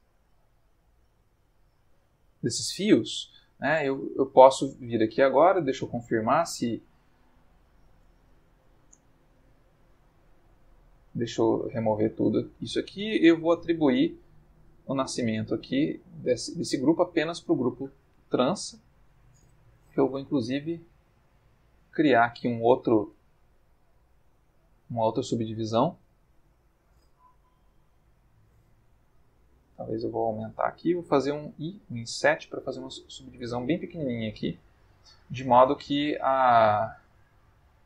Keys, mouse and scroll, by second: 0.7 ctrl+middle click, 1.6 click, 2.6 click, 4.2 Tab, 4.7 middle click, 5.8 click, 8.1 Tab, 8.9 Tab, 9.5 a, 10.3 a, 11.9 click, 12.7 middle click, 13.6 click, 15.2 click, 18.9 ctrl+middle click, 20.1 ctrl+r, 22.7 Escape, 23.3-24.4 ctrl+middle drag, 28.7 s, 30.6 click, 31.4 i, 34.6 click, 36.9 a.